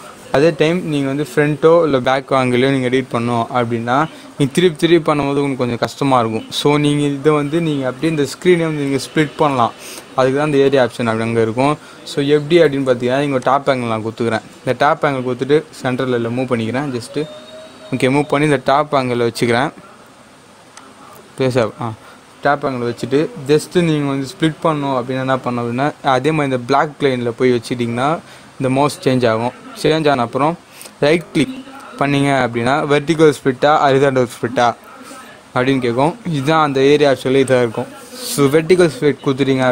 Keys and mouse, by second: 13.3 click, 16.3 g, 20.8 click, 31.0 right click, 39.6 click.